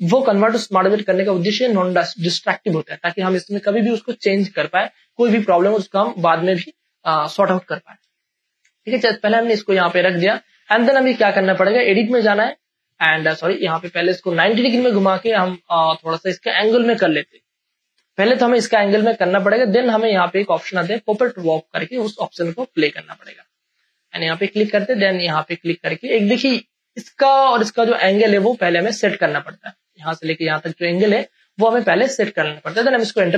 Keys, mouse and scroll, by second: 8.0 space, 8.1 click, 9.2 click, 9.2-12.1 drag, 13.4 space, 13.6 ctrl+click, 14.2 ctrl+t, 14.7 ctrl+space, 14.8 ctrl+click, 15.5 space, 15.9-17.4 drag, 17.4 ctrl+space, 17.8 ctrl+click, 17.9 ctrl+space, 18.9-20.8 drag, 20.7 space, 21.2 click, 21.3 space, 22.0 space, 22.5-26.2 ctrl+drag, 26.2 space, 26.7 ctrl+click, 27.8 ctrl+space, 28.1 ctrl+click, 28.3 ctrl+space, 28.9 click, 29.1 space, 31.5 click, 31.7 space, 31.8 click, 32.3 ctrl+click, 33.1 Return.